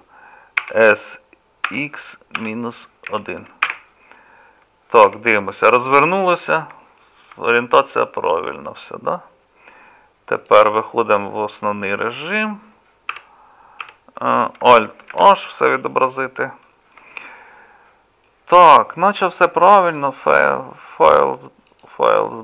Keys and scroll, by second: 13.1 KP_Divide, 13.8 KP_Divide, 15.1 alt+h, 15.2 KP_Divide.